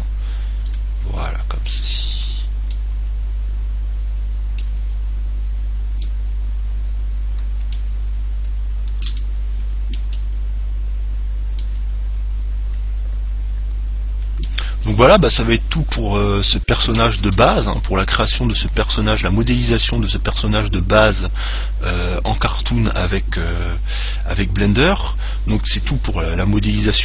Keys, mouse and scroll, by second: 1.3 Tab, 2.4 Tab, 2.9-8.0 middle drag, 8.4 middle click, 9.4-13.6 middle drag, 17.4 ctrl+s.